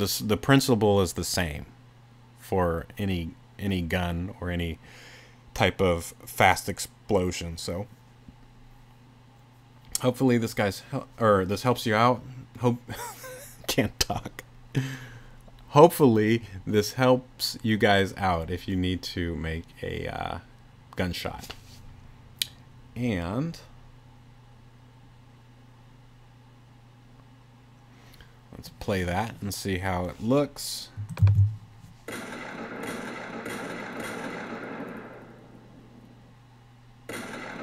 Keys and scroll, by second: 31.3 super+l.